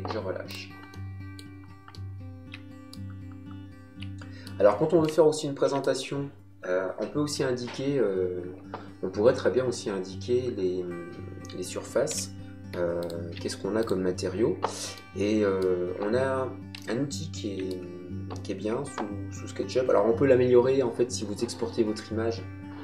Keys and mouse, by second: 0.9 middle click, 3.2 middle click, 12.1 b, 13.0 alt+click, 15.0 middle click, 16.7 middle click.